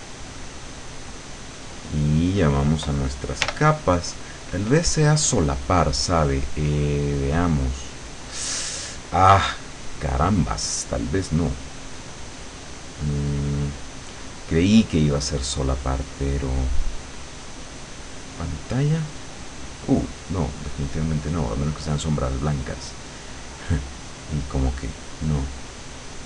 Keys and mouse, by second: 3.5 l, 5.9 click, 6.5-7.7 drag, 13.3-19.2 drag, 20.3-25.2 drag, 26.0 click.